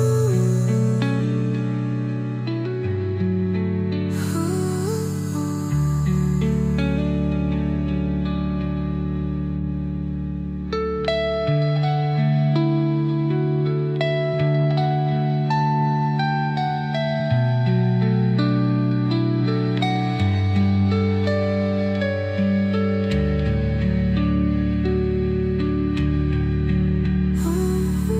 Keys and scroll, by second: 9.3 ctrl+g, 17.7 ctrl+z.